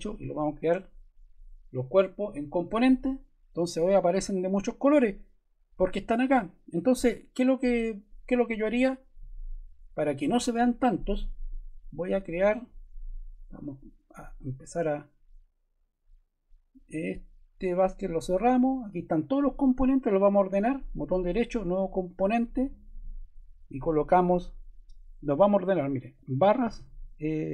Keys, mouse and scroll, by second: 22.1 click, 23.6 click, 25.8-27.5 typing.